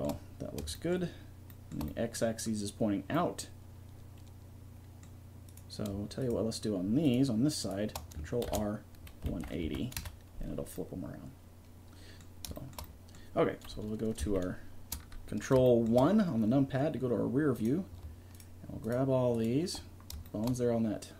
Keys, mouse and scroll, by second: 1.4-2.5 middle drag, 3.1-3.9 scroll up 1, 3.9-5.2 scroll up 1, 5.2 middle click, 5.5 right click, 6.2 click, 8.5 ctrl+r, 13.7 KP_1, 14.3 ctrl+KP_1, 17.3 click, 17.7-21.1 right drag, 17.8 click.